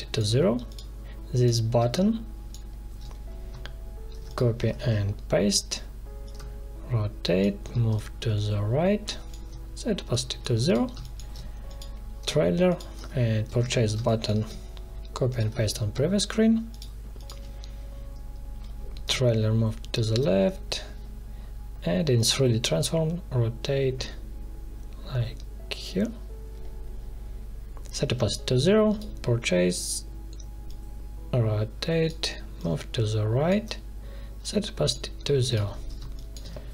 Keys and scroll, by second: 1.7 space, 4.1 ctrl+c, 4.7 ctrl+v, 10.8 space, 13.4 ctrl+c, 13.9 space, 15.5 ctrl+v, 35.9 space.